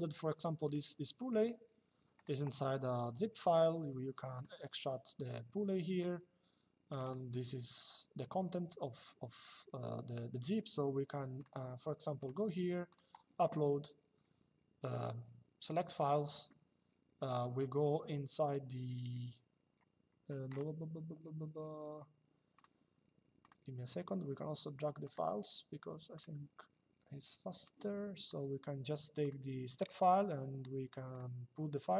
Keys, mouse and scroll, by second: 1.9 right click, 4.0 click, 6.6 click, 11.1 click, 15.5 click, 22.3 click, 24.7 click, 25.9 click, 27.3 click, 28.9 click.